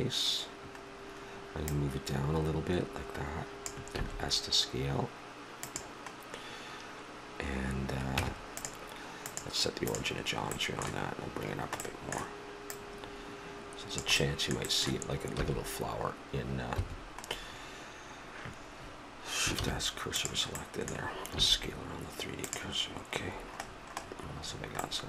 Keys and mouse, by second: 1.7-3.7 drag, 3.9 s, 8.1 Tab, 9.2 click, 10.6 middle click, 12.7-13.9 middle drag, 14.2 click, 15.3 s, 18.8 middle click, 19.6 shift+s, 21.3 s, 23.3 middle click.